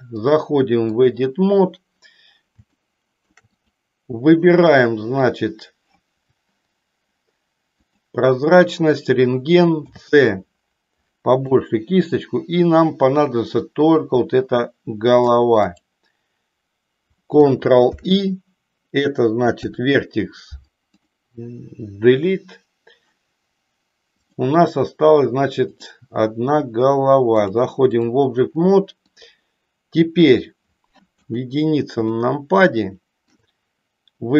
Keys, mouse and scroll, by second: 0.2-1.4 drag, 2.9 shift+middle click, 9.7 c, 17.9 ctrl+i, 19.4 Delete, 24.7 click, 25.9 click, 27.3 click, 29.0-30.4 middle drag, 31.2 KP_1, 32.2-33.4 shift+middle drag.